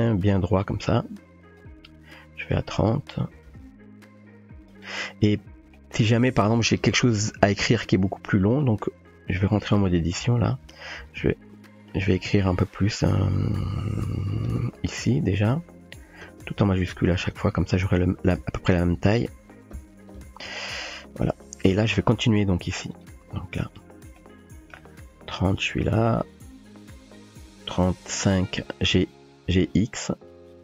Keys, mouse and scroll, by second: 1.6-2.5 drag, 3.5 g, 5.7 shift+drag, 7.7 Tab, 8.1 Tab, 9.1 Tab, 10.2 Up, 10.6 Right, 10.9 Right, 11.0 Right, 11.2 Right, 12.0 Left, 13.7-14.7 typing, 16.0-17.3 typing, 17.6 Tab, 18.5 Tab, 19.5-20.2 typing, 21.2 Tab, 24.2-24.7 shift+drag, 24.7 shift+middle drag, 25.6-28.3 drag, 29.1 f, 29.5 g.